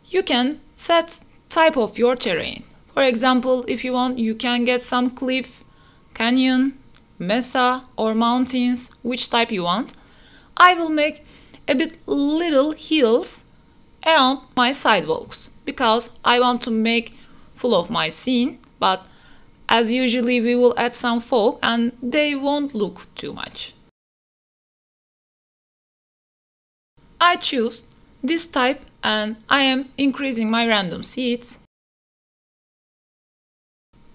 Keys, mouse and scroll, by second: 0.0-2.5 drag, 5.5-7.6 drag, 9.3-11.8 drag, 12.8-13.1 middle drag, 13.6-14.0 middle drag, 15.3-18.0 drag, 18.3 middle click, 18.8 shift+middle click, 19.0 middle click, 21.4-21.8 middle drag, 24.3-26.1 drag, 26.3 middle click, 29.5-32.3 drag, 33.6-34.1 drag.